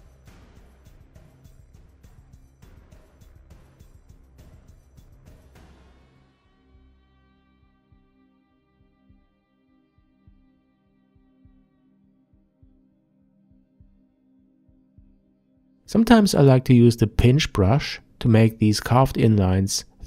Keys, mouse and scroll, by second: 4.3-7.5 drag, 8.9-12.7 ctrl+middle drag.